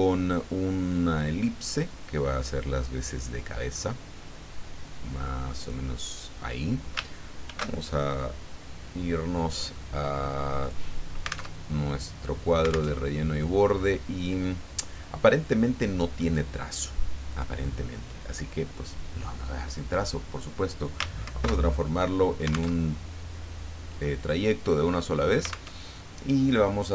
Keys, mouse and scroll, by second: 1.2-6.1 drag, 7.4 ctrl+shift+f, 10.6 click, 11.5 alt+Tab, 12.9 alt+Tab, 16.2 click, 17.3 click, 21.2 ctrl+shift+c, 22.8 alt+Tab, 25.7 alt+Tab.